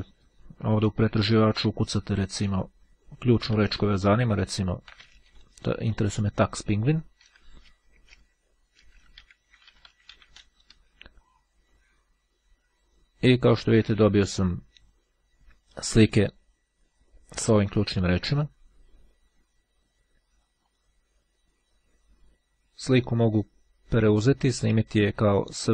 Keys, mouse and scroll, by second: 0.0 click, 4.0 t, 8.0 space, 8.5 e, 9.0 i, 15.2-15.9 scroll down 2, 16.0-16.6 scroll down 2, 16.6-17.1 scroll down 1, 17.6-18.9 scroll up 2, 18.9-19.3 scroll up 1, 20.8 click.